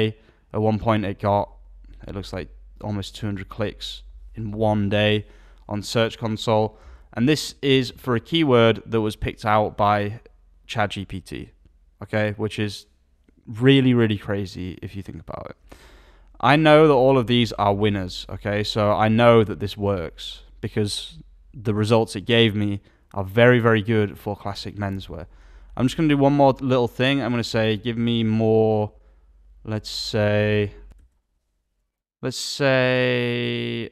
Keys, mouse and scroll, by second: 7.8 alt+a, 27.3 alt+a.